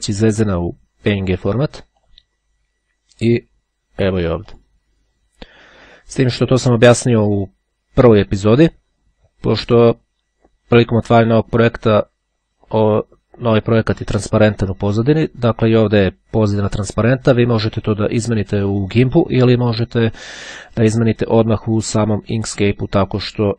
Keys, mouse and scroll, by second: 2.2 click, 4.5 click, 22.4 click, 23.1 click.